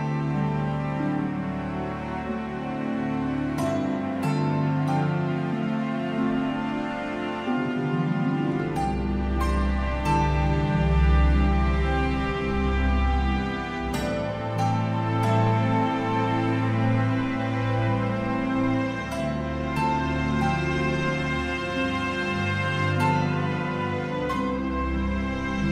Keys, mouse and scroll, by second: 0.2 click, 0.7 click, 1.7 click, 1.7 scroll down 2, 1.8 shift+middle click, 1.8-2.2 scroll up 2, 2.0 click, 2.6 click, 3.1 s, 5.3 click, 5.8 click, 8.8-9.3 scroll down 8, 8.9 middle click, 9.0 alt+a, 9.2 shift+middle click, 9.3 scroll up 5, 9.4 click, 9.7 ctrl+space, 9.9 middle click, 9.9 scroll down 1, 10.1 shift+middle click, 10.7 click, 11.1 KP_0, 12.9 click, 13.4 r, 13.5 alt+a, 13.5 scroll down 6, 13.6 ctrl+space, 13.6 scroll up 3, 13.9 scroll down 1, 14.0 middle click, 14.2 shift+middle click, 14.3 click, 14.5 click, 14.8 middle click, 15.0 s, 15.1-16.0 scroll up 4, 15.6 click, 16.0-16.3 scroll down 2, 16.1 shift+middle click, 16.3 click, 17.9 alt+a, 17.9 scroll down 4, 18.1 scroll up 1, 18.2 middle click, 18.3 scroll down 3, 18.4 click, 18.6 click, 18.8 KP_Decimal, 19.0 middle click, 19.2 shift+middle click, 19.3 click, 19.5 shift+middle click, 19.6 scroll up 2, 19.6 middle click, 19.9 click, 20.3 click, 20.3-20.6 scroll down 3, 20.4 middle click, 20.6 click, 21.0 click, 21.3 s, 22.3 alt+a, 22.3 scroll down 4, 22.3 scroll up 2, 22.4 shift+middle click, 22.6 middle click, 22.6-23.0 scroll down 1, 23.3 middle click, 23.3 scroll up 2, 23.5 scroll down 3, 23.5 shift+middle click, 23.6 scroll up 2, 23.7 middle click, 23.9 scroll down 2, 24.0 middle click, 24.0 scroll up 1, 24.3 middle click, 24.3 scroll down 1, 24.5 shift+right click.